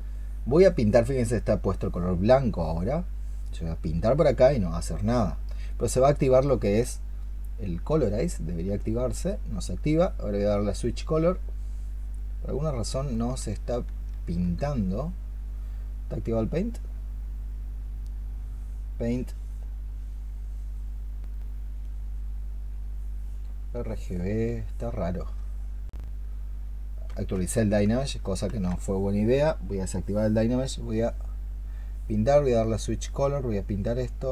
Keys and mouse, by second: 13.1 space, 25.0 ctrl+click, 28.3 ctrl+z.